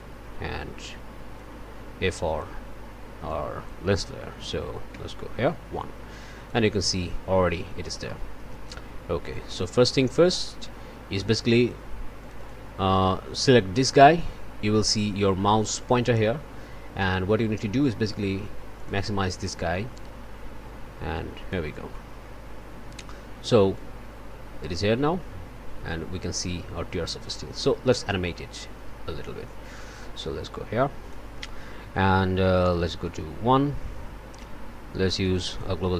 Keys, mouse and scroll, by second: 1.3-2.6 drag, 3.2 click, 4.9 1, 6.2 click, 8.0 click, 9.3 click, 10.1 click, 11.2 click, 12.2 click, 18.7 click, 19.9-21.7 drag, 21.9 click, 23.7-31.3 drag, 33.0 click, 35.1 click.